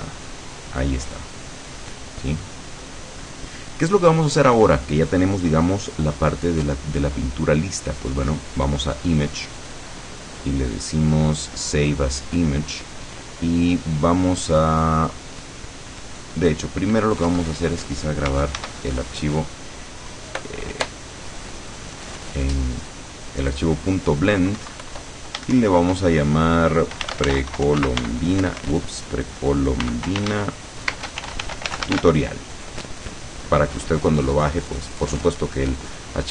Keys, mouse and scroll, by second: 1.2-3.8 middle drag, 9.4 click, 12.3 click, 17.4 Escape, 18.6 ctrl+s, 20.5 right click, 21.4 click, 23.6 click, 24.9 Home, 26.8-28.5 typing, 29.7-32.5 typing.